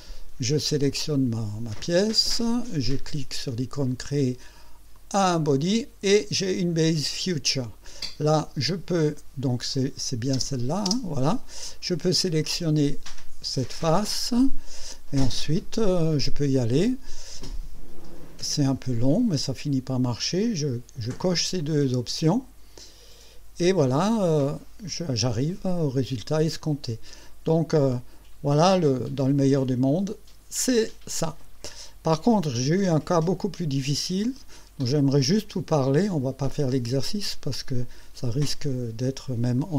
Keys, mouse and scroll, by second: 4.9 click, 8.1 click, 9.7 click, 10.3 space, 11.7 click, 12.4 click, 14.3 click, 16.5 click, 20.1 click, 24.2 click, 26.6-27.8 drag, 27.9-31.6 drag, 32.3 click, 34.2 click, 35.7 click, 37.2 click, 39.6-39.7 drag.